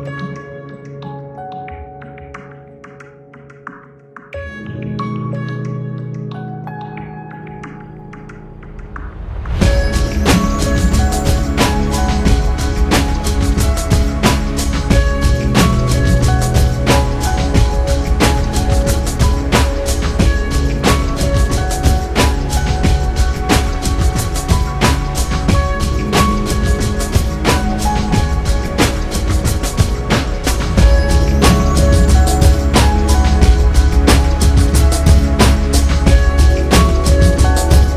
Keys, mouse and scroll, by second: 1.1 click, 3.2 a, 7.1 x, 7.7 click, 10.0 click, 11.2 a, 12.3-13.7 scroll down 4, 13.7-14.8 scroll up 2, 14.8-15.4 scroll up 1, 16.8 click, 17.9 a, 19.7 x, 20.7 click, 23.5 click, 25.0 a, 25.9 x, 27.8 click, 30.9-32.1 drag, 32.2-34.6 shift+middle drag, 34.6-35.4 shift+scroll up 5, 35.4 middle click, 37.7 ctrl+alt+p.